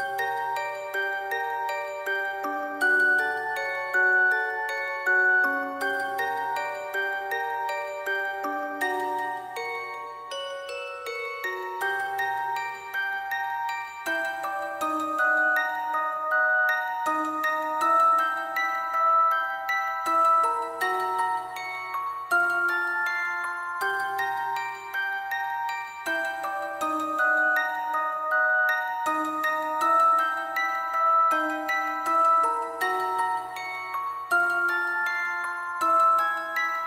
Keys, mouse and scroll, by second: 0.6 shift+click, 0.7 alt+click, 2.5 alt+click, 8.0 alt+click, 8.2 shift+click, 8.3 alt+click, 9.3 double click, 13.0 alt+click, 14.1 shift+click, 14.2 alt+click, 14.4 alt+click, 15.5 shift+click, 15.6 alt+click, 16.4 alt+click, 17.1 shift+click, 17.2 alt+click, 18.8 alt+click, 19.0 shift+click, 19.2 alt+shift+click, 19.5 alt+click, 20.9 shift+click, 21.0 alt+shift+click, 22.6 alt+shift+click, 23.1 alt+click, 23.3 alt+click, 26.8 alt+click, 28.0 shift+click.